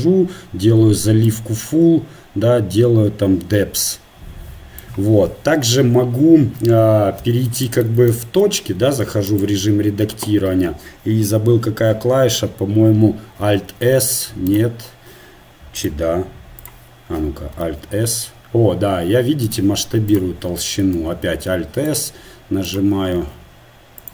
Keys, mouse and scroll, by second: 0.0-7.2 drag, 7.2-9.3 middle drag, 7.2 z, 8.6 Tab, 9.3-13.6 right drag, 13.6 alt+s, 16.8 click, 20.1-21.2 drag, 21.2 alt+s, 22.7 click, 23.2 alt+s.